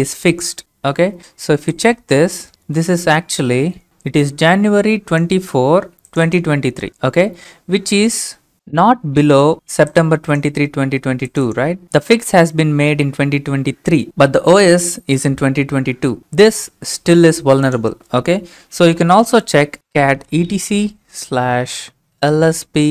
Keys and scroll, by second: 10.2 alt+Tab, 14.1 alt+Tab, 18.7-22.9 typing.